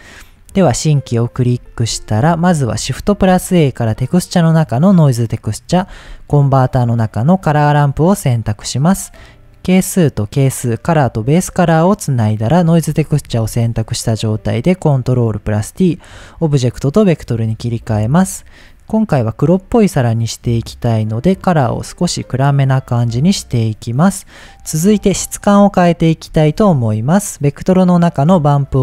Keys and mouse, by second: 0.3 click, 1.2-2.5 drag, 3.0 shift+a, 5.9 shift+a, 8.9-10.3 drag, 10.9-12.0 drag, 12.5 click, 13.3 ctrl+t, 13.7 middle click, 14.8-15.5 drag, 16.0-16.3 middle drag, 16.3 click, 18.5 click, 19.1 click, 24.5 Delete, 26.3 shift+a.